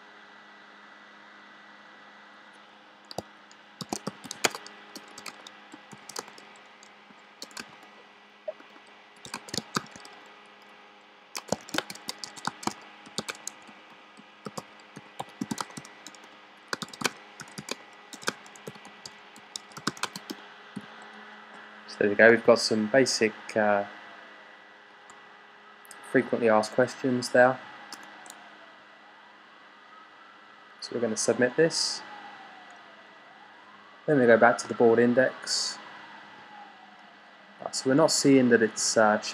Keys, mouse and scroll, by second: 3.4-10.1 typing, 11.2-22.4 typing, 27.8 BackSpace.